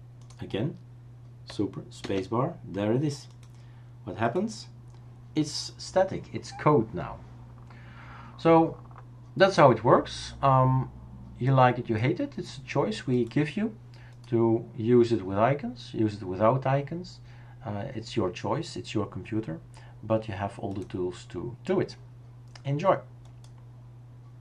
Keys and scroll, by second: 2.1 super+space.